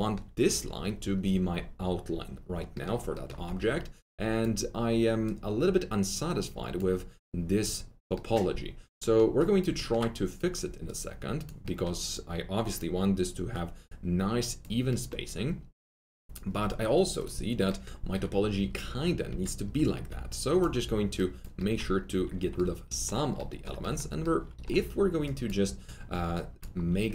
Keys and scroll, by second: 3.4 1, 19.2 F3, 19.6 F3, 19.9 F3.